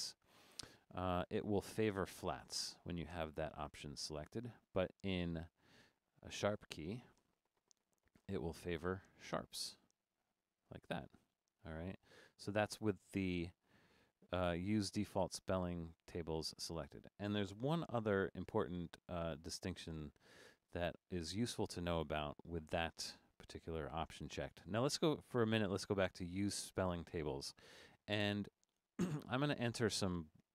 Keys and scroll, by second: 12.2 Escape, 17.6 BackSpace, 19.0 BackSpace.